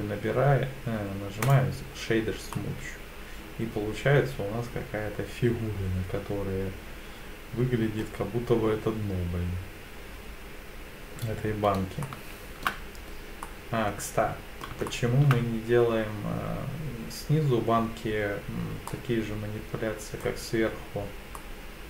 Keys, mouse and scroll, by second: 2.5-8.0 middle drag, 12.0-12.7 shift+middle drag, 13.4-14.6 middle drag, 14.9-15.3 shift+middle drag, 19.0-20.2 middle drag, 21.4-21.8 middle drag.